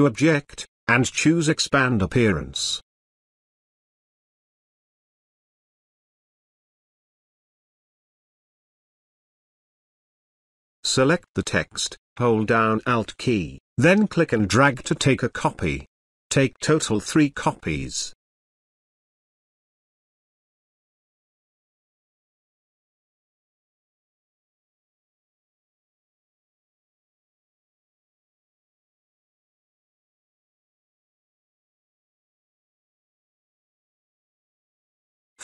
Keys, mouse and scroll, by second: 2.5 click, 4.9 click, 8.4 click, 11.4 click, 11.5-16.2 alt+drag, 21.4-28.7 alt+drag, 32.3-34.7 drag.